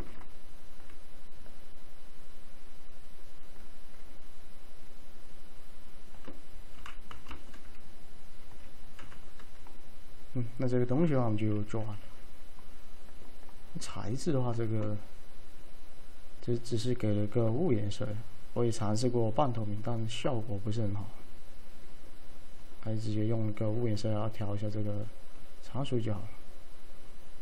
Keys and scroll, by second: 0.0 z, 7.0 p, 7.2 F3, 9.1 F3, 10.3 typing, 11.7 m.